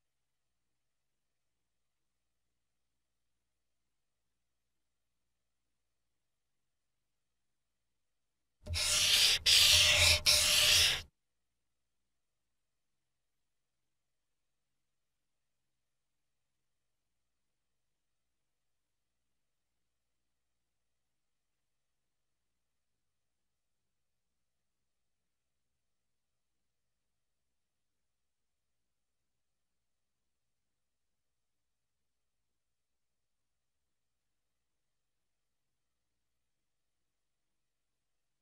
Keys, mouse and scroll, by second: 8.0 click, 12.7 click, 16.4 click, 17.4 click, 34.2 Escape, 35.2 scroll down 1, 36.6 KP_0.